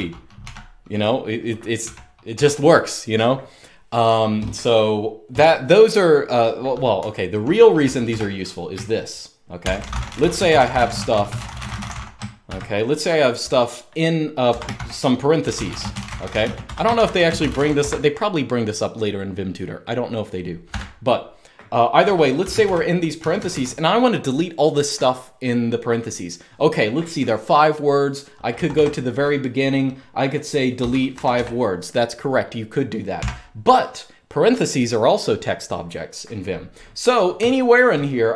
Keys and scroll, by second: 0.0-0.1 typing, 1.5-2.0 typing, 6.7-7.8 typing, 9.1-11.5 typing, 14.3 Escape, 14.4-18.1 typing, 20.4 typing, 21.9-23.2 typing, 28.2 typing, 30.6-31.5 typing, 32.9 typing, 37.1-38.1 typing.